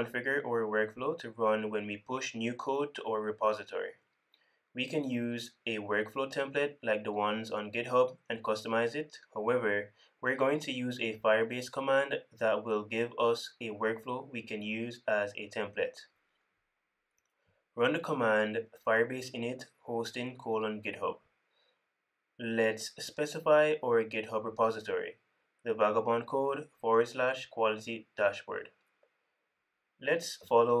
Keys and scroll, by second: 23.5 super+w.